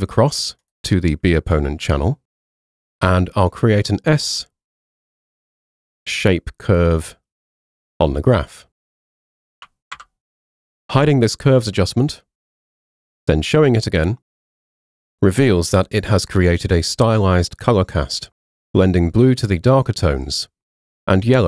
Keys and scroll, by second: 10.0 super+0.